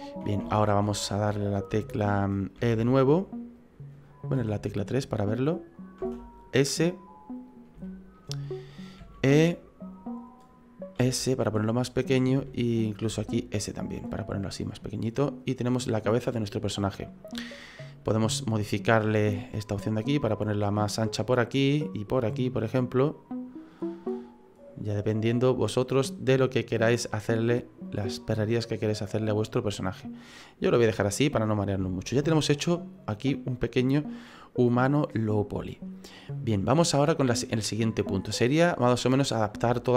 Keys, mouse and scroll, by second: 0.5 shift+middle click, 0.8 middle click, 1.3 shift+middle click, 2.6 e, 4.4 KP_3, 6.0 s, 7.8 shift+middle click, 9.0 e, 11.0 s, 12.4 e, 13.1 s, 14.8 middle click, 15.5-15.9 scroll down 4, 15.9 middle click, 18.2 click, 19.1 right click, 19.7 click, 20.8 middle click, 22.1 right click, 22.7 click, 23.8 middle click, 27.1 click, 27.8 right click, 28.5 click, 29.3 middle click, 30.2 middle click, 30.8-31.5 scroll down 5, 31.2 middle click, 31.8 shift+middle click, 32.2 middle click, 38.3-38.7 scroll up 5, 38.7 middle click, 39.6 shift+middle click.